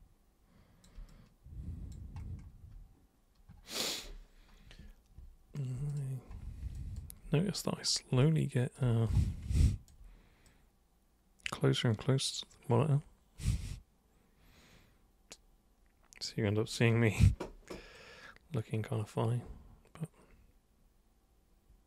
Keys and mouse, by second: 1.1 alt+super+click, 5.9 super+click, 6.8 alt+click, 8.2 b, 8.2 click, 9.6 alt+click, 10.5-16.3 drag, 17.9-21.8 drag.